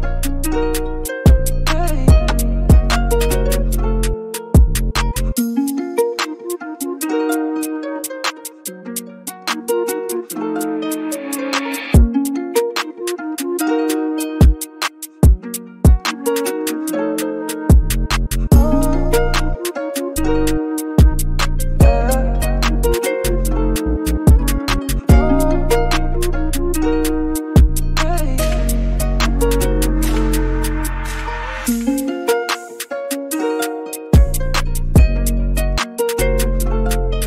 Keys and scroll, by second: 1.3 BackSpace, 10.2-11.0 typing, 12.3-12.7 typing, 17.7 typing, 27.3 super+z.